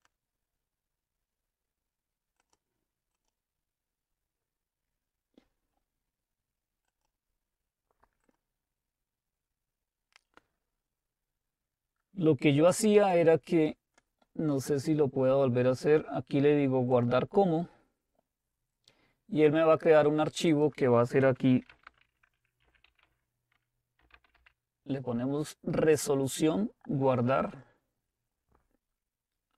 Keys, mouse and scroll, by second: 0.0 click, 2.9 click, 7.0-9.8 drag, 13.0 click, 17.0 click, 20.5-21.7 drag, 21.4-24.9 typing, 27.7 click.